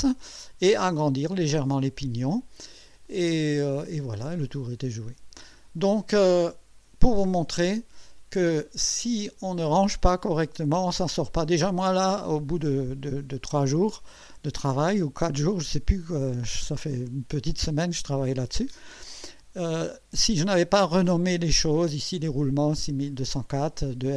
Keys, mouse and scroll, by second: 2.0 click, 3.1-4.6 drag, 5.1 scroll down 1, 5.8-7.1 drag.